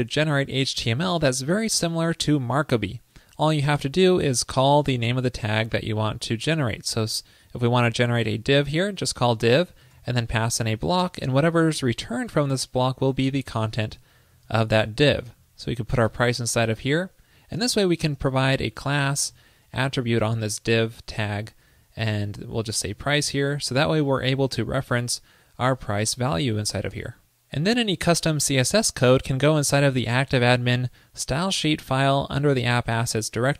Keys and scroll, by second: 13.4 alt+Left, 14.7 super+Right, 26.8 super+s.